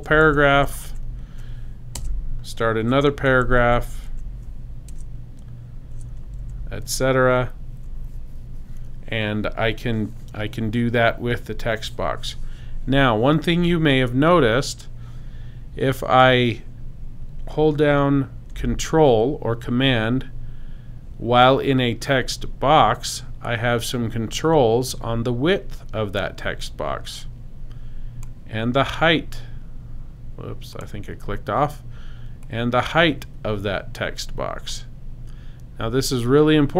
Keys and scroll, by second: 1.9 super+Return, 2.5 Return, 3.1 super+Return, 3.3 super+v, 4.9 super+Return, 5.5 Return, 6.2 super+Return, 6.4 super+v.